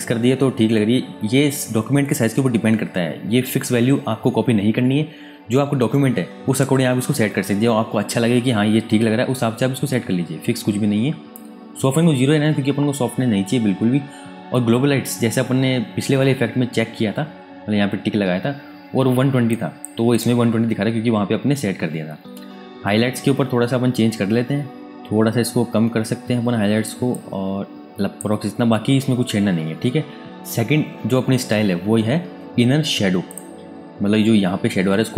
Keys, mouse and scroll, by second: 19.5 click, 24.7 alt+Num_Lock, 24.8 Tab, 25.4 click, 32.3 alt+Num_Lock, 32.4 Tab, 33.2 click.